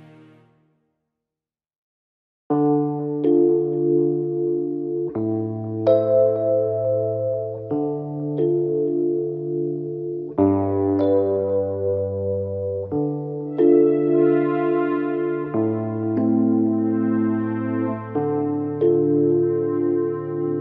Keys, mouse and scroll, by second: 0.4 shift+middle click, 0.9-1.8 scroll up 1, 1.8 click, 2.7-3.3 scroll down 2, 3.3 KP_1, 4.0-6.1 shift+middle drag, 6.1-9.2 drag, 9.5-10.2 drag, 11.1-12.1 scroll up 2, 12.1 e, 14.4 KP_3, 15.5 click, 17.1 r, 18.8 click.